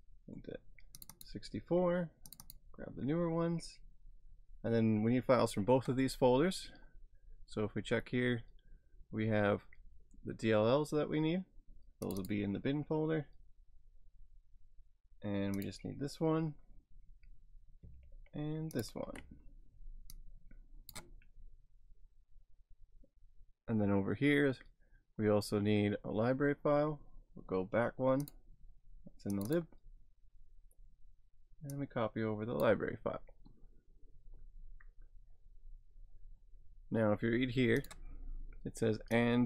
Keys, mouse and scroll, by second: 1.0 click, 7.3-8.5 scroll down 3, 12.1 click, 15.6 click, 16.8 scroll down 1, 18.7 ctrl+click, 20.2 click, 28.2 click, 31.8 click, 37.8 click, 39.2 click.